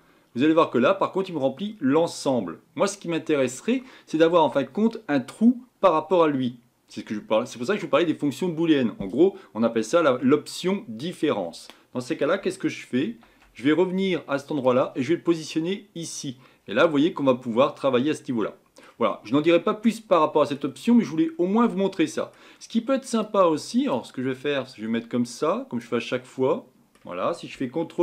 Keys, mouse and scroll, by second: 0.4-0.7 scroll down 2, 0.8-13.0 middle drag, 13.0 ctrl+z, 16.0 click, 16.6-17.2 scroll up 4, 17.2-17.6 scroll down 1, 17.6-28.0 middle drag.